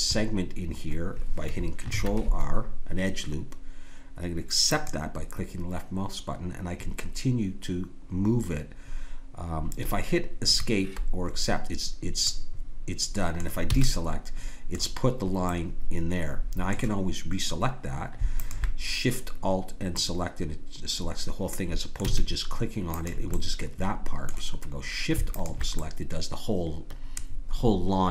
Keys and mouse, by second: 1.9 ctrl+r, 12.3-15.5 middle drag, 13.7 a, 18.3-20.4 drag, 20.4-22.0 middle drag, 22.0 a, 22.9-24.9 drag, 26.0 middle click, 26.3-27.6 drag.